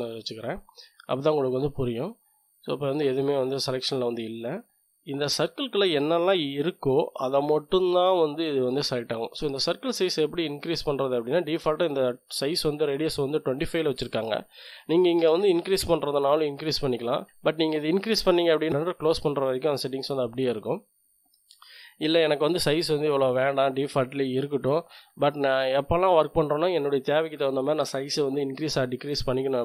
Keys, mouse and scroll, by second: 1.6 click, 2.5 click, 5.3-11.1 drag, 13.9 click, 15.1-16.0 typing, 17.1 click, 17.9-19.4 drag, 20.5 click, 21.3 2, 21.5 KP_5, 21.9 Return, 24.0 click.